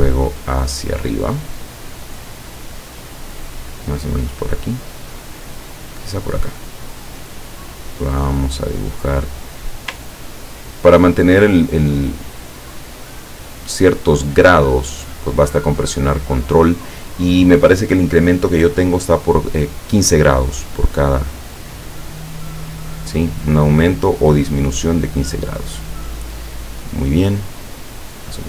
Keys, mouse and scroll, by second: 6.8 click, 28.3 ctrl+click.